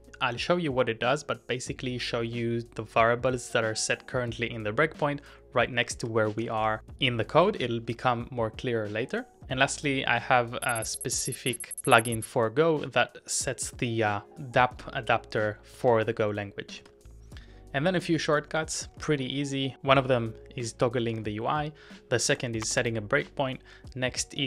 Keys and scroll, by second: 5.5-7.9 typing, 15.8-17.3 typing, 20.3-22.9 typing, 24.3-24.4 typing.